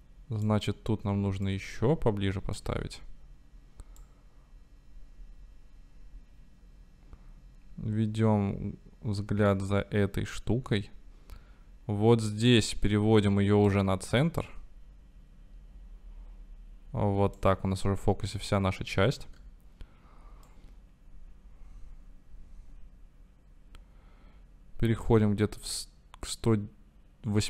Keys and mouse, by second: 1.5-2.8 drag, 2.8 i, 4.1-4.6 drag, 4.6-7.5 middle drag, 9.5-14.0 drag, 14.5-17.6 drag, 19.4 i, 20.6 drag, 20.8-27.4 right drag.